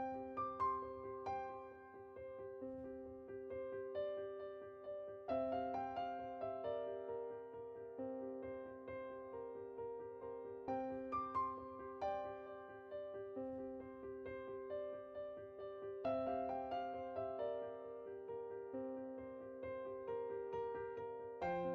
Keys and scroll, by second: 7.3-8.4 typing, 14.5-15.3 typing, 17.9-18.7 typing.